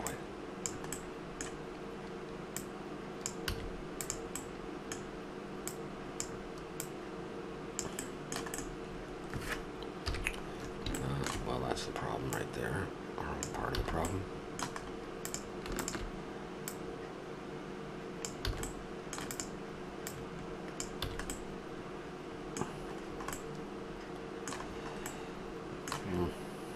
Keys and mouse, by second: 0.1 click, 1.0 middle click, 2.5-3.5 drag, 3.5 a, 4.4-6.2 middle drag, 6.2-7.7 drag, 7.7-8.8 middle drag, 10.0 KP_3, 12.4-14.8 drag, 13.8 a, 15.2-18.5 drag, 18.5 a, 18.7 middle click, 19.3-21.1 drag, 21.1 a, 21.4-22.7 middle drag, 23.1-24.7 middle drag, 24.7 middle click.